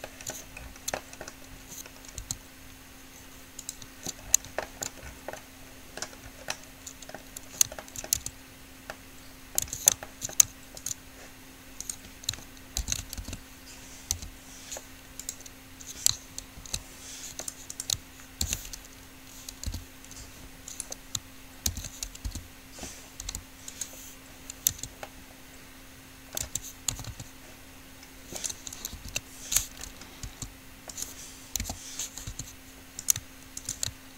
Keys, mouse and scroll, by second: 1.0 middle click, 2.5 s, 6.7 click, 6.9 middle click, 7.1-8.1 drag, 8.5 Tab, 10.0 Tab, 13.0 ctrl+l, 13.5 alt+p, 14.5 u, 16.9 ctrl+z, 18.7 ctrl+l, 20.0 p, 22.0 ctrl+l, 22.5 p, 23.5 u, 25.0 Tab, 26.7 Tab, 27.1 a, 27.5 a, 29.2 ctrl+l, 30.5 s, 31.8 o, 32.5 s.